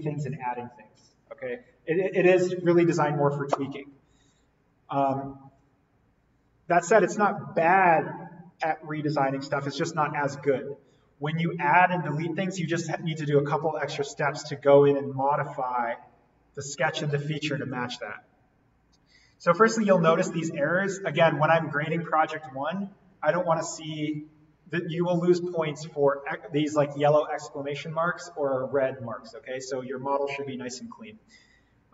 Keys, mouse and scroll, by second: 17.5 right click, 19.3 click.